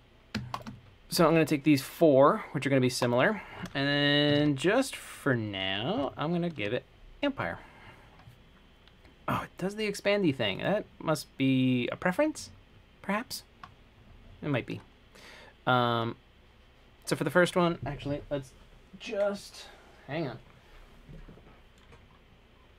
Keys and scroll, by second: 4.3-6.7 typing, 6.8 Return.